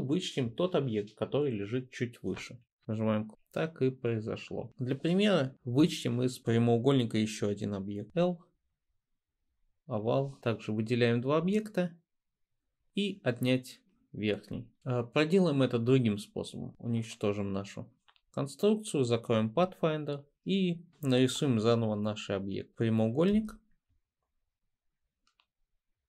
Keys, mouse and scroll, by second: 8.1 l, 16.7 BackSpace, 23.4 m.